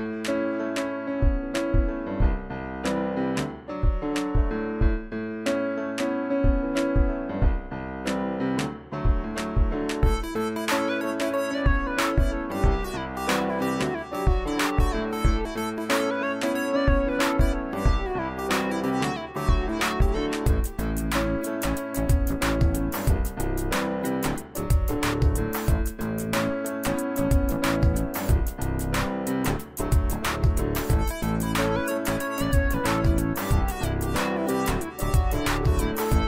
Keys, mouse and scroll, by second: 11.1 click, 22.2 click, 25.9 click, 25.9-31.5 drag.